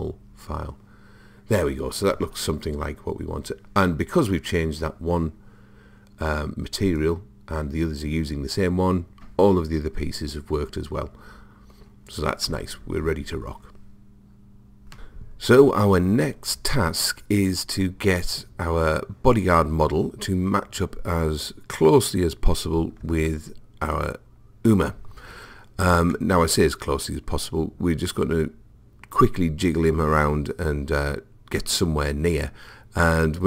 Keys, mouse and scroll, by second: 4.4-6.9 middle drag, 6.9 click, 24.5 click, 26.1-28.9 middle drag.